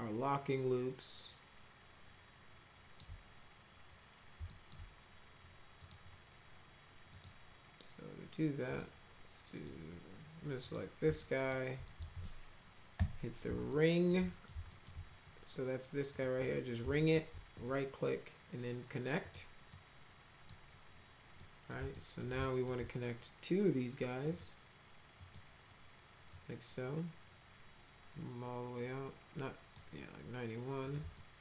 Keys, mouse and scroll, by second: 4.4 alt+middle click, 5.8 click, 7.1 click, 8.6 click, 9.5 click, 10.5 click, 11.1 alt+middle click, 11.8 alt+middle click, 12.9 Right, 13.6 alt+middle click, 14.2 middle click, 14.7 alt+middle click, 16.1 click, 16.3 click, 16.9 alt+middle click, 17.5 right click, 19.2 click, 19.6 middle click, 21.3 middle click, 21.9 alt+middle click, 22.3 alt+middle click, 24.3 click, 25.1 click, 26.2-29.7 drag, 30.8 click, 31.1 alt+middle click.